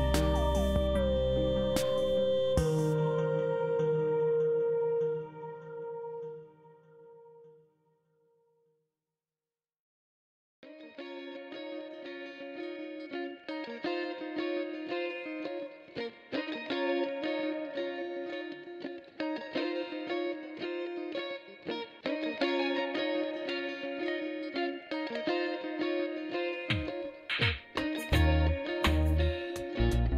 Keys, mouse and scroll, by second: 0.1 shift+s, 1.8 shift+s, 2.7 shift+s, 3.9 shift+s, 4.9 shift+s, 6.2 shift+s, 7.3 shift+s, 8.4 shift+s, 11.3 shift+s, 15.7 shift+s, 17.4 shift+s, 19.0 shift+s, 21.0 shift+s, 22.2 shift+s, 24.6 shift+s, 25.7 shift+s.